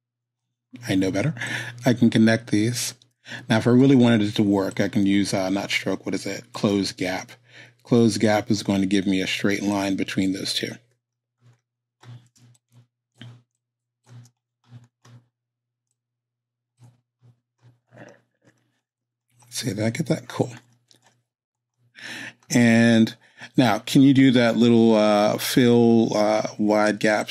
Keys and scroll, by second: 3.5 z, 12.3 space, 26.8 space.